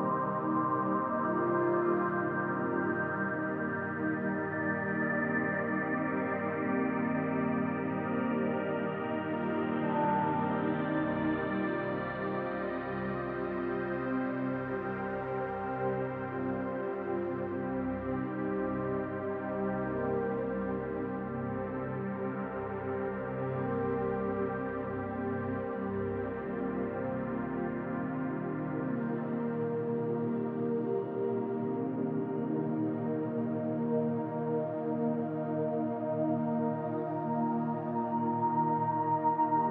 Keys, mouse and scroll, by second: 1.9 middle click, 8.0-8.5 scroll down 2, 8.5 middle click, 11.0-13.1 scroll up 10, 13.1 click, 13.1-14.8 scroll up 3, 14.8 KP_0, 15.9 scroll up 4, 16.3 middle click, 17.3-17.6 scroll down 2, 17.7 middle click, 18.8-19.1 scroll up 2, 19.4 middle click, 21.5 shift+middle click, 22.3 middle click, 23.2 shift+middle click, 24.0-24.4 scroll up 2, 24.5 shift+middle click, 26.1 scroll down 1, 26.6 middle click, 29.6 click, 31.5-31.9 scroll down 2, 31.9 middle click, 34.1 click, 38.8 click.